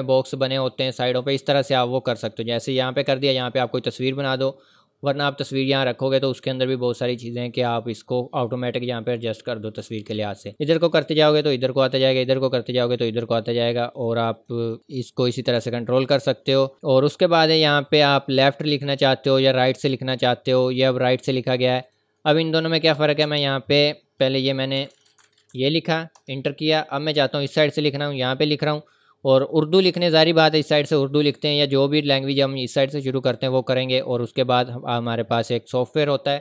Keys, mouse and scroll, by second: 1.2 click, 10.4 click, 19.5 click, 22.3 scroll up 1, 22.9 Return, 23.2 Up, 24.8 a, 26.2 Return, 28.1 click, 34.0 click.